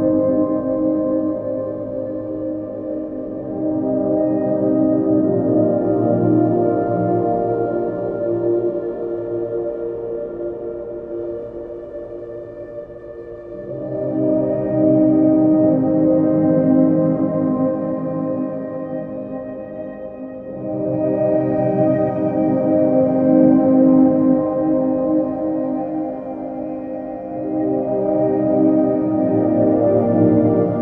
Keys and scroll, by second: 29.3 ctrl+j.